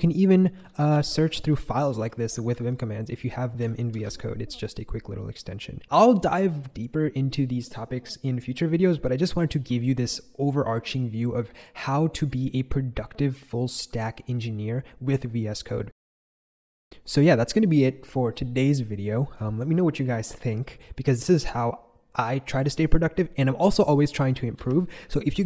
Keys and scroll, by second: 0.0-3.1 typing, 3.9 shift+super+x, 24.6 super+b.